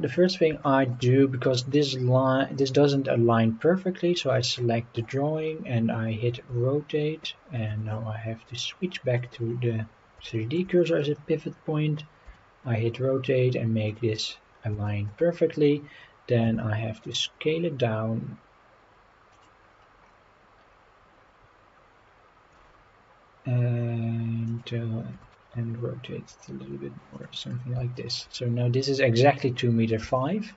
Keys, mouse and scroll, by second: 0.0-0.5 scroll down 2, 0.6 shift+middle drag, 1.1-1.4 scroll up 3, 4.2-4.7 scroll down 5, 5.0-5.5 scroll up 4, 6.4 r, 7.5 Escape, 8.6-9.3 drag, 9.9 scroll down 1, 10.3 shift+middle drag, 10.9 scroll up 2, 12.3 r, 13.9 click, 14.9 shift+middle drag, 15.3 scroll down 3, 16.5 s, 16.6 middle click, 19.3 click, 19.7-20.1 scroll up 4, 20.7-21.2 scroll up 2, 22.5 s, 24.5 click, 25.2 r, 27.1 click, 27.4 scroll down 3, 28.0 shift+middle drag, 29.6 scroll down 2, 30.2 shift+middle click.